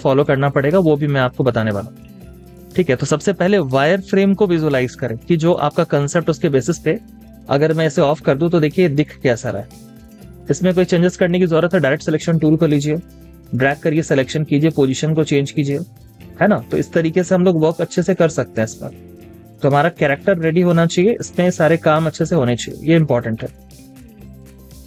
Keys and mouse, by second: 1.0 double click, 1.2 space, 5.0 space, 8.6 z.